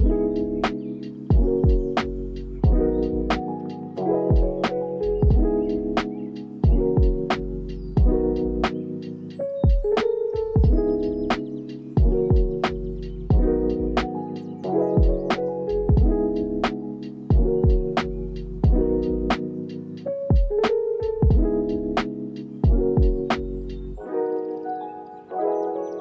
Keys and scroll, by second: 0.5 space, 0.8 ctrl+s, 5.6 u, 13.8 space, 16.1 space, 16.5 ctrl+a, 18.0 ctrl+s, 23.8 ctrl+s.